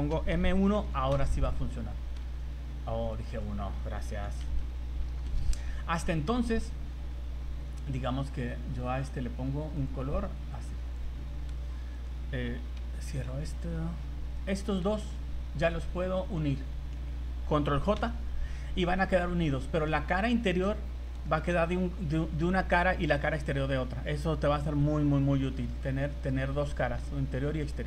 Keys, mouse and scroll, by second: 2.2 z, 2.5 z, 3.1 click, 3.3 click, 6.9-7.2 scroll down 2, 7.6 right click, 8.2 right click, 8.7-9.1 scroll down 7, 9.7 click, 11.5 z, 12.0 right click, 12.8 h, 14.4 right click, 15.1 shift+right click, 15.9-16.5 scroll down 5, 18.0 ctrl+j, 18.6 z, 19.5 middle click, 20.8 scroll up 3, 21.3 shift+middle click, 21.6 scroll down 1, 22.1 middle click, 23.5 scroll down 3, 25.7 scroll down 1, 25.7 middle click, 27.1 scroll up 3, 27.6 middle click.